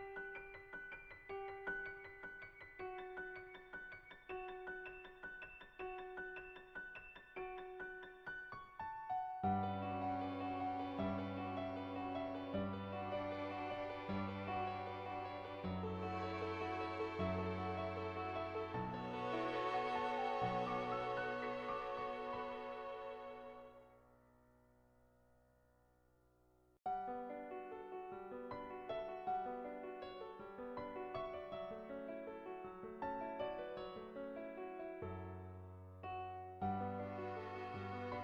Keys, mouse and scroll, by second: 0.0-1.3 drag, 2.1-3.7 middle drag, 4.9 click, 5.8 middle click, 6.7 middle click, 7.5 shift+middle click, 8.0 middle click, 9.0 shift+middle click, 10.5 click, 11.1 click, 11.3 shift+middle click, 11.8-14.4 middle drag, 15.1 shift+middle click, 16.1 middle click, 16.7 shift+middle click, 25.3 right click, 25.9 shift+middle click, 27.1 right click, 29.7 g, 32.2 x, 33.0 click, 33.6 g, 35.2 g, 36.7 s.